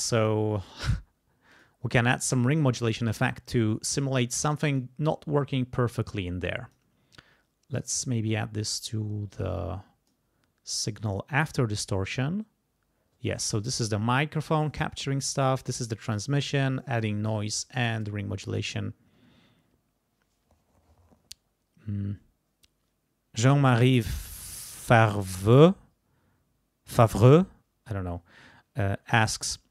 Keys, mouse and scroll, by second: 0.6 click, 1.5 click, 2.6 click, 4.2 click, 6.4 click, 7.9-10.3 drag.